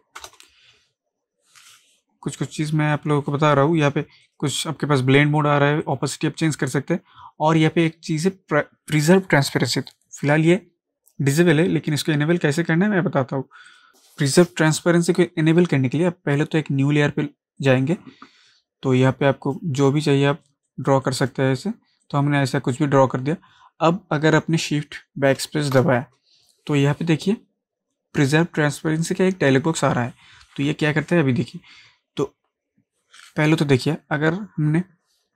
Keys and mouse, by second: 2.9 click, 13.7 click, 15.6 ctrl+z, 15.7-17.6 alt+right drag, 19.4-25.1 drag, 25.4 shift+Num_Lock, 25.4-28.6 drag, 33.2 click.